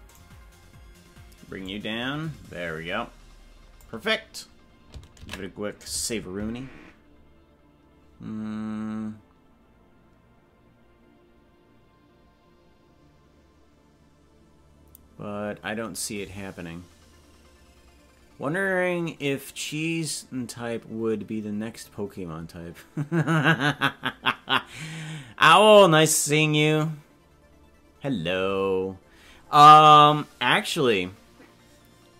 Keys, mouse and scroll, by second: 0.3-1.6 right drag, 1.6-3.9 drag, 8.3 ctrl+s.